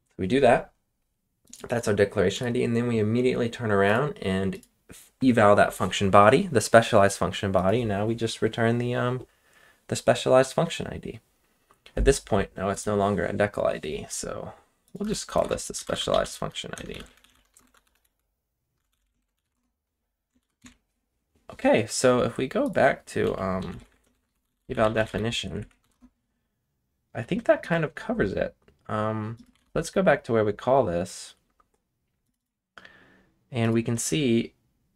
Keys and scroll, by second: 14.8-19.9 typing, 20.4 ctrl+c, 20.6 ctrl+s, 23.0-25.9 typing, 29.3-30.0 typing.